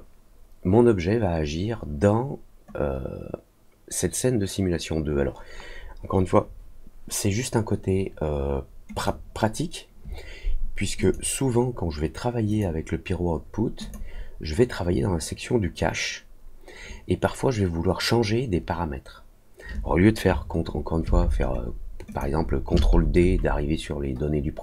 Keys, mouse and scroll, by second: 8.9 click, 10.9 click, 12.4 click, 13.7 click, 22.0 click.